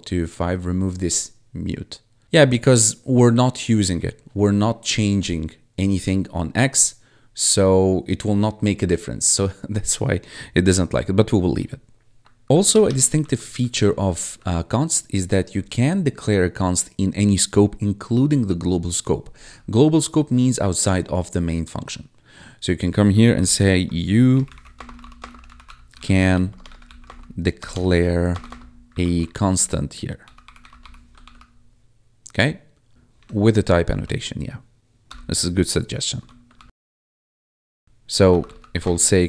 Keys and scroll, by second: 12.4 Down, 12.6 Return, 13.1 ctrl+s, 13.9 ctrl+Down, 23.3 ctrl+/, 24.0-31.3 typing, 32.9 w, 33.1 Tab, 33.8 ctrl+s, 36.1 ., 36.5 ctrl+s, 37.8 ctrl+s, 37.9-39.2 typing.